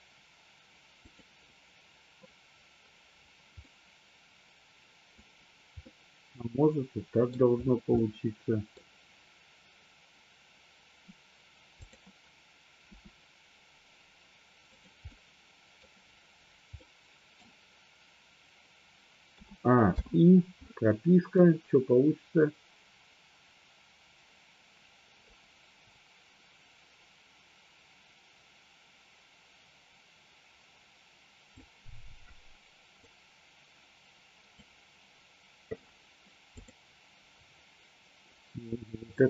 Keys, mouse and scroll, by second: 1.0 click, 3.7-5.1 middle drag, 5.7-7.4 middle drag, 7.9-8.7 middle drag, 12.7 r, 14.6 click, 15.0-15.7 middle drag, 16.7-17.5 middle drag, 19.2 a, 19.9 i, 21.4-31.6 drag, 33.0-34.5 drag, 36.5 click, 39.0 click.